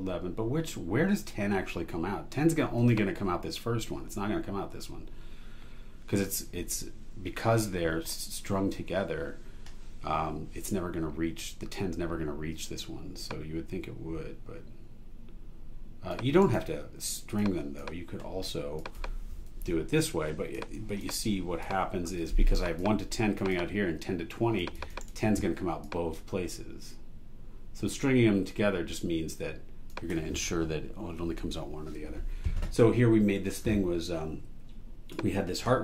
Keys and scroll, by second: 16.4 super+e, 19.5 BackSpace, 25.0 super+e.